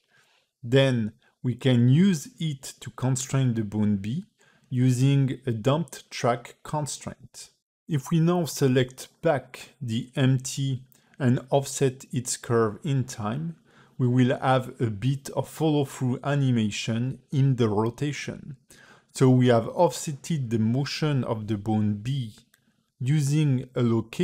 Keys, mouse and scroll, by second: 0.0 g, 1.7 click, 2.6 click, 3.1 ctrl+Tab, 3.3 click, 4.7 click, 5.6 click, 7.8 click, 9.9 space, 11.3 space, 11.7 ctrl+Tab, 11.9 click, 12.4 space, 13.3 g, 22.8 space, 23.4 scroll up 4, 23.8 a, 23.9 a.